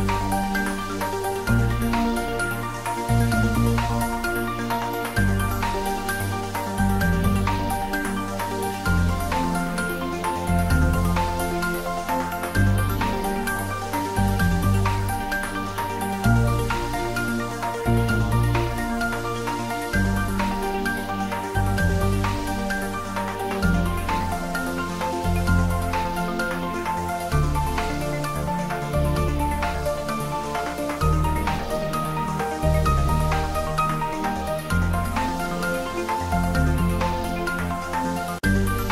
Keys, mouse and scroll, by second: 0.2 Return, 1.0 click, 1.8-3.4 typing, 4.3 Return, 4.5 ctrl+s, 4.9 middle click, 5.8 ctrl+s, 6.0-8.1 ctrl+middle drag, 8.1-9.7 ctrl+middle drag, 9.7 ctrl+s, 10.0 ctrl+middle click, 11.1 click, 12.2-13.8 ctrl+middle drag, 13.8 click, 14.8-15.4 ctrl+middle drag, 15.4 click, 15.9 ctrl+middle drag, 16.6 shift+click, 17.1 click, 17.8 shift+click, 18.5 ctrl+middle click, 19.0 shift+middle click, 20.0 click, 21.5 shift+click, 22.3 ctrl+z, 23.3 shift+click, 24.0-25.7 ctrl+middle drag, 25.7 click, 26.7 shift+click, 27.3 x, 27.7 click, 29.6 shift+click, 31.3-32.7 typing, 33.9 click, 34.1 ctrl+middle click, 34.6 shift+middle click, 35.3-36.5 typing, 37.2 click, 37.7 shift+d, 38.3 x.